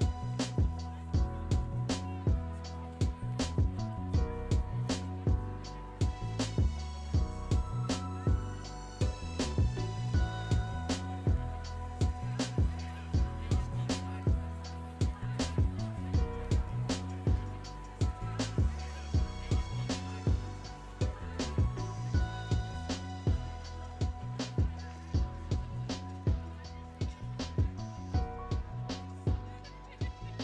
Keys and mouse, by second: 0.7 shift+click, 1.3 shift+click, 1.9 s, 6.3 click, 6.6 Tab, 7.4 ctrl+a, 8.0-9.2 drag, 11.2 click, 12.5-13.9 drag, 14.8-17.0 drag, 18.9 click, 22.2 g, 22.8 click, 23.0 s, 24.5 click, 24.8 g, 25.7 click, 26.0 r, 26.3 r, 30.1 click.